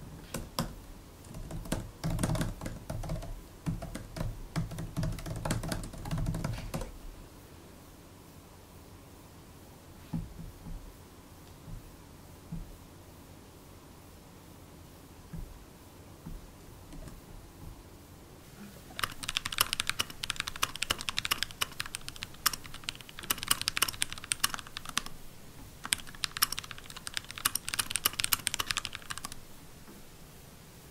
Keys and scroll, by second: 0.0-6.9 typing, 16.8 shift+super+d.